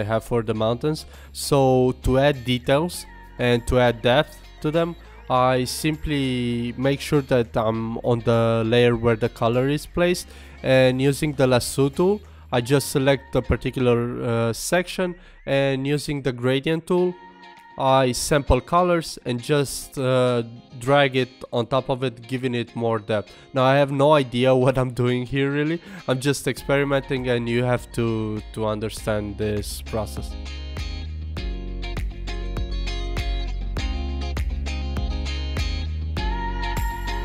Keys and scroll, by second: 18.6 super+z, 19.8 super+z, 21.0 super+z, 22.7 super+z, 23.1 super+z, 23.4 super+z, 23.7 super+z, 24.0 super+z, 25.0 super+z, 25.7 super+z, 27.0 super+z, 27.5 super+z, 27.9 super+z, 28.5 super+z, 28.8 super+z, 30.2 super+z, 32.5 super+z, 33.2 super+z, 34.3 super+z, 34.6 super+s, 35.6 super+z, 36.3 super+z.